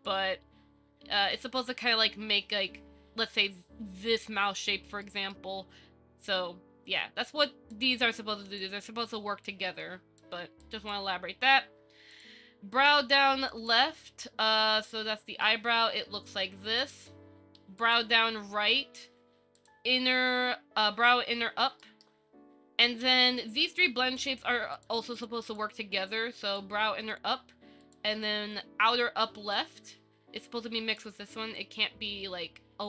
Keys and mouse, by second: 0.7 Tab, 5.2-5.5 shift+drag, 7.6-7.9 drag, 8.4 click, 9.7 click, 10.8 click, 13.7 click, 14.9 shift+middle click, 17.0 click, 19.8 click, 22.0 shift+middle click, 24.4 click, 25.3 click, 26.9 click, 29.7-31.2 drag, 31.8-32.8 drag.